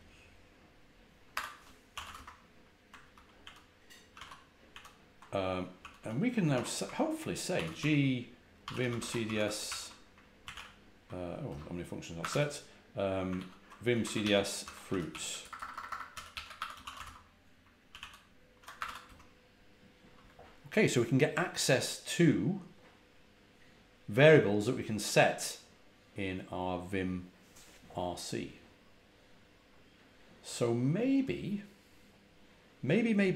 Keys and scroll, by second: 1.2 ⟲, 1.9 w, 2.1 Return, 2.9 ctrl+a, 3.3 ctrl+h, 4.0 ctrl+a, 4.1 ctrl+l, 4.6 ctrl+h, 5.7-9.7 typing, 10.4 ctrl+x, 10.4 ctrl+o, 11.4 Return, 12.1 Escape, 12.2 u, 13.3 ctrl+r, 13.7-16.9 typing, 16.9 Return, 17.8 ctrl+a, 17.9 ctrl+h, 18.7 Escape, 18.8 k, 19.0 Return.